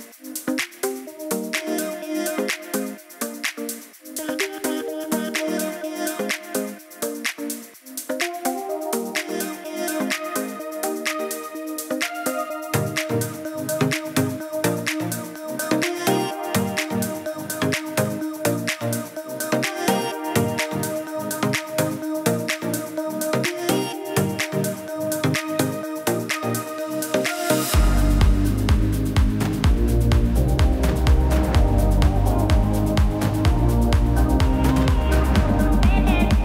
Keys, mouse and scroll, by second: 1.8 space, 3.7-16.0 drag, 15.8 space, 18.7-19.3 click, 19.8 typing, 20.7 click, 21.4 right click, 22.3 click, 26.7 click, 31.8 click, 34.0 shift+click.